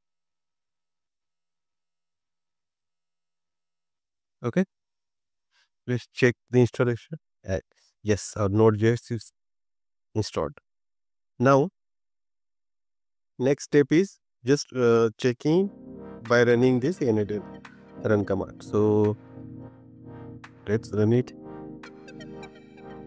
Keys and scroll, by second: 5.2 BackSpace.